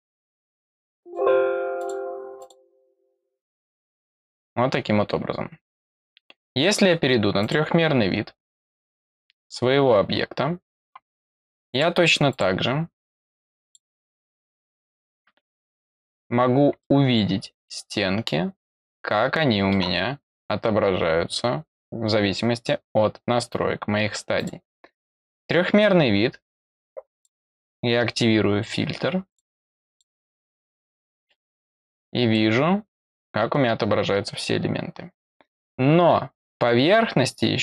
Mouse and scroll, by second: 0.0 click, 0.5 click, 1.0 click, 1.7 click, 2.3 click, 3.8 click, 7.3 click, 10.4 middle click, 10.4 scroll down 2, 11.6 click, 12.2 click, 13.6 click, 14.5 click, 15.9 click, 16.7-19.7 middle drag, 24.3 click, 27.1 click, 29.2 click, 29.8 click, 31.0 click, 31.8 middle click, 32.5-35.0 scroll down 1, 35.0-37.6 scroll down 1.